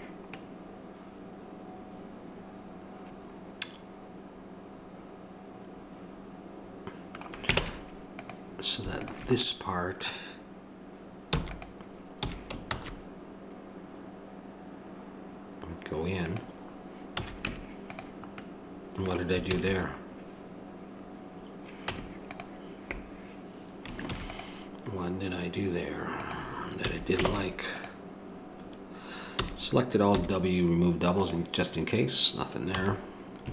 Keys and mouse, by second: 7.6 ctrl+Tab, 9.0-11.0 drag, 11.3 e, 17.1 a, 17.4 Tab, 19.5 ctrl+z, 21.8 Tab, 24.1 ctrl+r, 26.8 a, 27.3 ctrl+Tab, 29.3 a, 30.1 w, 32.8 a.